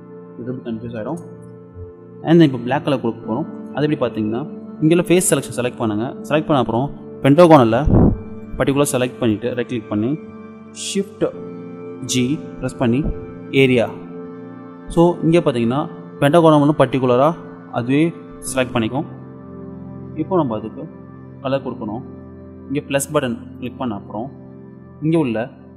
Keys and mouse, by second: 5.0-6.8 middle drag, 9.4-11.2 middle drag, 12.1 shift+g, 23.6-25.7 drag.